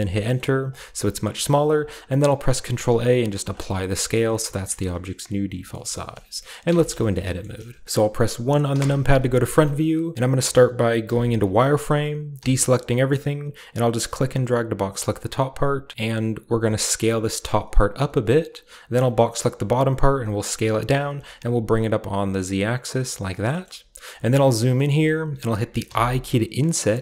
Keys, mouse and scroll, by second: 0.2 middle click, 0.3-3.3 scroll up 1, 1.3 typing, 1.8 ctrl+a, 3.4-4.5 drag, 4.3-5.6 shift+scroll up 1, 5.6-7.4 scroll up 1, 6.5 shift+middle click, 6.7 Tab, 7.1 shift+middle click, 7.4-9.2 shift+middle drag, 8.7 KP_1, 9.4-11.0 shift+middle drag, 9.5-10.1 shift+scroll up 1, 10.1-11.0 scroll up 1, 11.0 z, 12.4 a, 13.9 click, 16.6 s, 18.5 click, 19.0 click, 20.0 s, 20.6 click, 20.9 g, 21.2 z, 23.2 click, 23.5 shift+middle click, 23.6-25.8 shift+scroll up 1, 24.2-25.8 shift+middle drag, 24.2 typing, 25.8 typing.